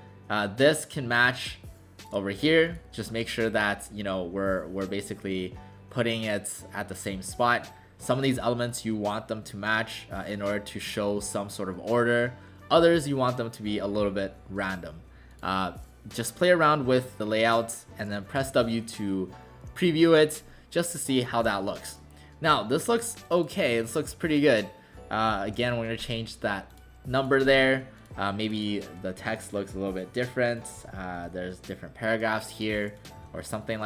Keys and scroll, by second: 18.4 w, 21.3 w, 25.5 BackSpace, 25.6 BackSpace, 30.7 Return, 31.2 Return, 33.2 w.